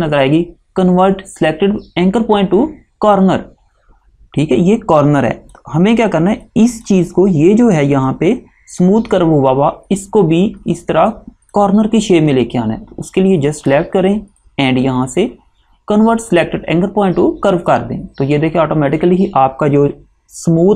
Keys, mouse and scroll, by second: 5.1 click, 11.2 click, 17.8 click.